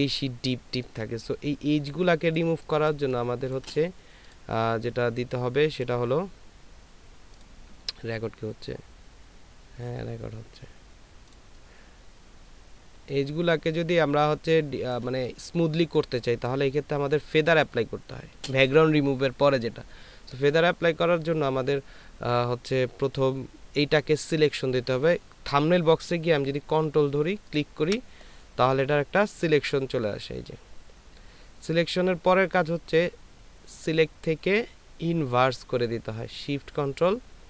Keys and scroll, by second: 13.3 ctrl+space, 16.0 ctrl+space.